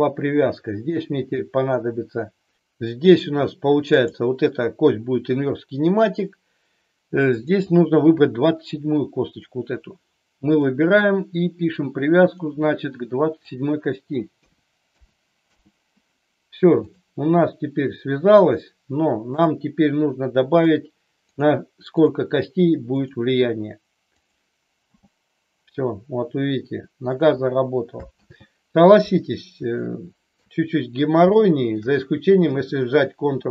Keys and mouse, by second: 3.9 click, 7.3-10.7 drag, 11.8-15.8 drag, 21.2 click, 21.9 click, 22.9 click, 24.9 g, 26.9 click, 28.0 ctrl+z, 29.8-30.3 shift+middle drag, 31.3 shift+middle click.